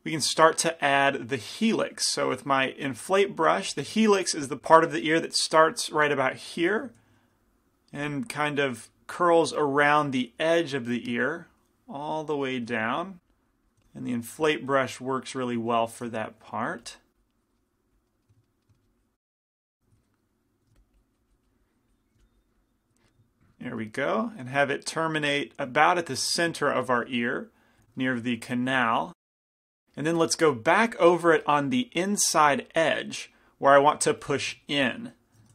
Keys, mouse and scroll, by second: 1.0-3.8 middle drag, 2.4 i, 3.1 f, 4.2 middle click, 5.8-8.2 drag, 7.2 shift+f, 8.8-10.9 drag, 11.2-15.4 drag, 12.9 f, 13.9 f, 15.3-18.1 middle drag, 15.9 click, 16.8 f, 17.2-18.8 drag, 18.3-20.5 middle drag, 19.0-20.5 drag, 19.4 f, 20.5 ctrl+z, 20.8 f, 21.0-25.3 drag, 22.2 f, 23.6 middle click, 25.3 middle click, 26.0-27.8 drag, 26.8-29.8 middle drag, 29.1 click, 29.1 right click, 30.1 middle click, 32.6 f, 32.7-35.5 drag, 32.7-34.2 right drag, 34.2 f.